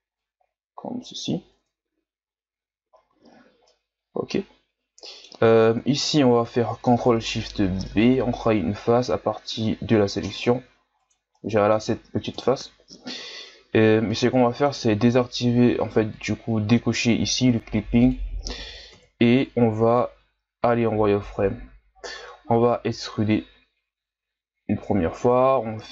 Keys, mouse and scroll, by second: 0.2-1.6 drag, 1.6 Tab, 2.0-2.8 scroll down 7, 2.8 scroll up 3, 3.3 scroll down 1, 3.6-5.4 middle drag, 5.4 scroll up 1, 5.6 Tab, 6.0-8.0 middle drag, 8.0 ctrl+shift+b, 11.4 middle click, 12.3 KP_1, 14.1-16.1 middle drag, 16.1-18.9 drag, 18.9 KP_1, 19.8-21.2 shift+scroll down 1, 21.2 z, 21.5 scroll up 2, 23.5 e, 25.6 r.